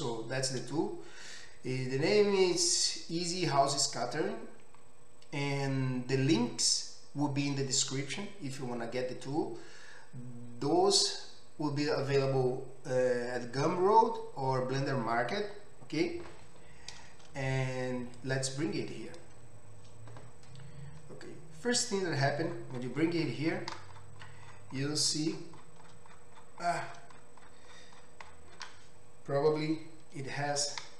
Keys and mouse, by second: 23.7-30.9 middle drag, 29.5 KP_Decimal.